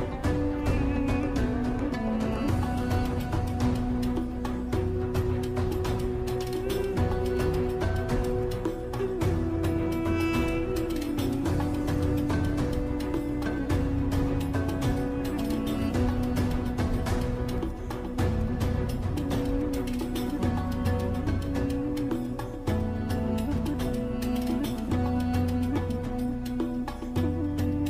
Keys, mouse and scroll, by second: 3.8 BackSpace, 4.1 click, 6.5 ctrl+d, 7.2 click, 9.5 d, 11.8-22.1 drag, 24.9 Right, 26.9 Right.